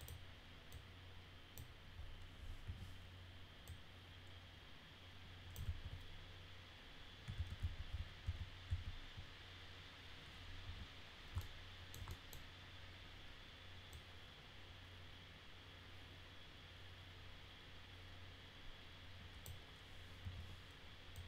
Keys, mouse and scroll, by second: 0.0 click, 0.7 click, 2.6 e, 3.7-5.5 drag, 7.4 ctrl+z, 7.6 ctrl+z, 7.9 ctrl+z, 8.7 ctrl+z, 10.6 w, 11.4 alt+middle click, 12.1 middle click, 13.9-19.4 drag, 20.2 e, 21.1-21.2 drag.